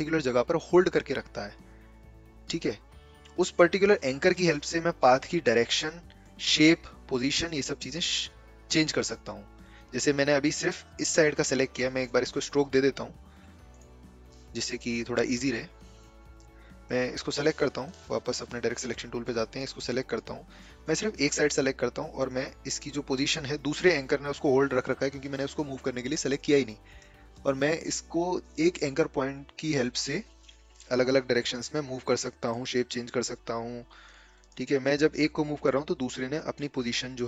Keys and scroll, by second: 18.2 Delete, 18.2 a.